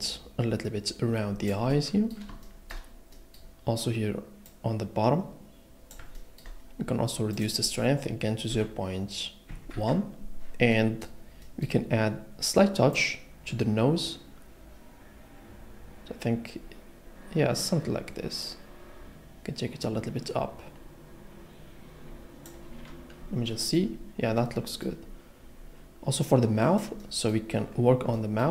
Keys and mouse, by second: 6.3 shift+middle click, 7.3-9.8 drag, 12.9 click.